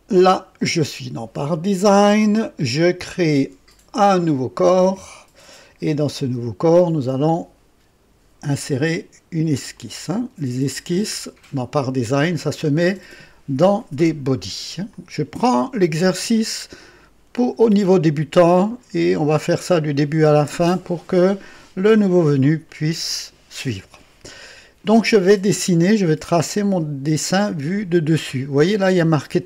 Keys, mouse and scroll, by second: 4.6 click, 9.6 click, 12.7 click, 14.8 click.